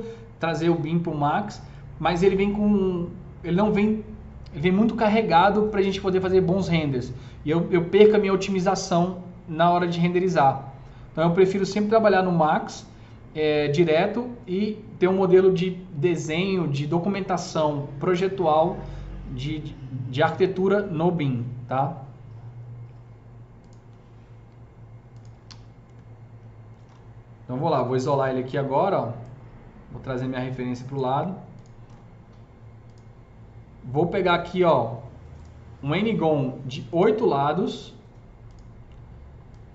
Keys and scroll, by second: 25.5 z, 25.9 F3, 26.7 typing, 28.1 alt+q.